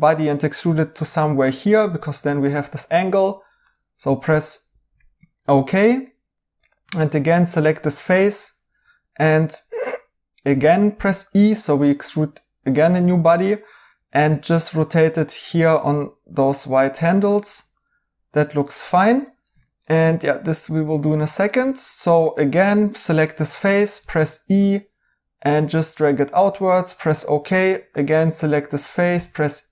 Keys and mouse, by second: 1.3 right click, 4.9 right click, 10.4 e, 18.4 right click, 21.0 right click, 23.9 e, 27.2 right click, 29.1 e.